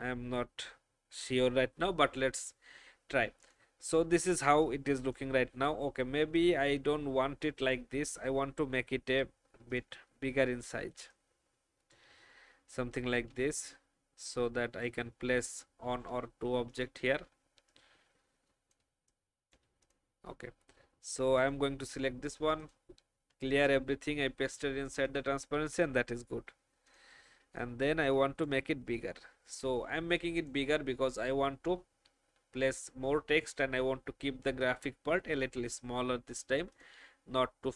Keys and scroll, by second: 18.9 space, 23.5 ctrl+Delete.